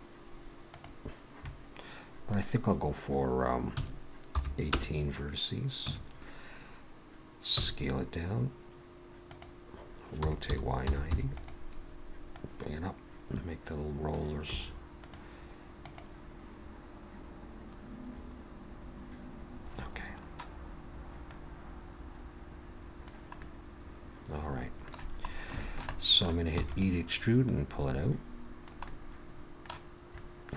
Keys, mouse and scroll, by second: 2.3 click, 5.9 Tab, 7.6 s, 10.2 r, 12.3 click, 14.5 s, 21.3 click, 23.4 middle click, 25.3-25.6 scroll up 2, 25.6 shift+middle click, 25.9 middle click, 26.6 e, 27.5 click, 28.9 middle click, 30.1 middle click.